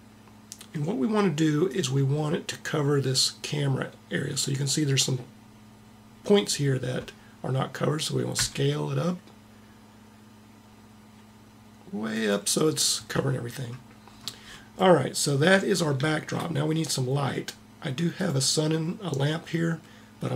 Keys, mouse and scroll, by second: 8.3 s, 18.2-20.0 drag.